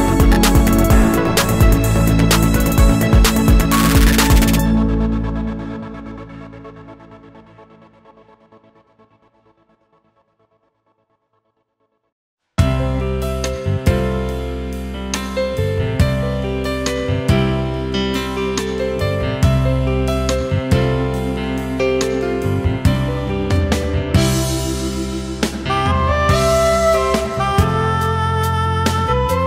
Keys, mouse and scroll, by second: 0.6 alt+click, 1.8 ctrl+shift+a, 2.2 alt+scroll down 1, 2.4 space, 3.4 alt+scroll up 1, 3.6 space, 4.2 alt+scroll up 1, 5.3 alt+click, 6.6 ctrl+shift+a, 7.3 alt+click, 8.7 space, 9.6 alt+click, 11.2 alt+click, 13.6 alt+click, 15.2 alt+click, 16.3 alt+click, 17.3 alt+click, 18.7 alt+click, 20.1 alt+click, 22.5 alt+click, 23.9 ctrl+shift+a, 25.9 alt+scroll up 1, 27.1 ctrl+shift+a, 27.5 alt+scroll down 1, 27.8 space, 28.8 alt+scroll up 1.